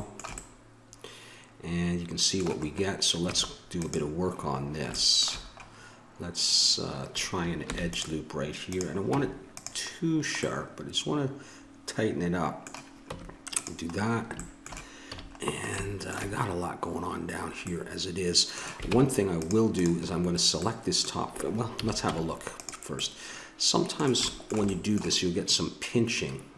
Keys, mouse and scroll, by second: 0.0 middle click, 3.2 Tab, 4.4-7.5 middle drag, 7.6 ctrl+r, 9.1 Tab, 13.0 Tab, 15.1 a, 18.9 ctrl+Tab, 21.8 a, 22.1 Tab.